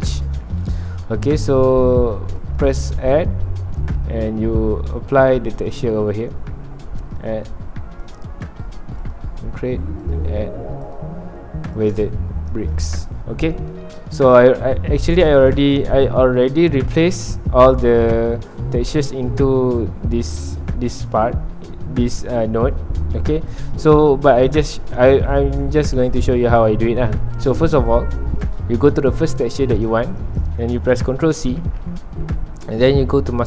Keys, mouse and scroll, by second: 2.6-13.1 drag, 13.1 scroll down 1, 15.1 click, 23.5 click, 32.8 click.